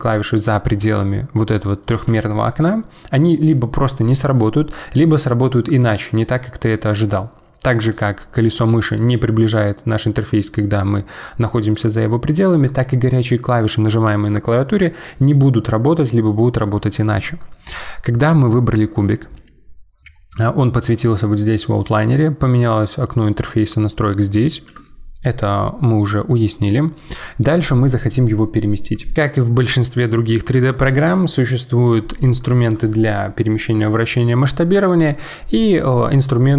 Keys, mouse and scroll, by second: 0.9-4.1 middle drag, 8.6-8.9 scroll up 7, 9.0-9.4 scroll down 5, 9.4 scroll up 3, 9.7-10.6 scroll down 3, 10.6 scroll up 2, 10.9 scroll down 1, 10.9 scroll up 3, 18.3 click, 29.1 click.